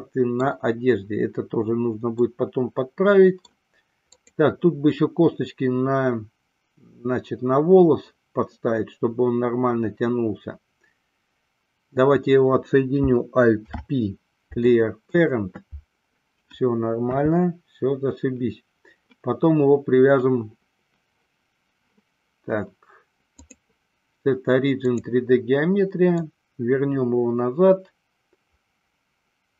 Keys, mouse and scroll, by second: 2.3-3.7 middle drag, 4.5 click, 13.6 alt+p, 17.2 KP_3, 23.5-25.1 drag, 26.3-29.5 drag.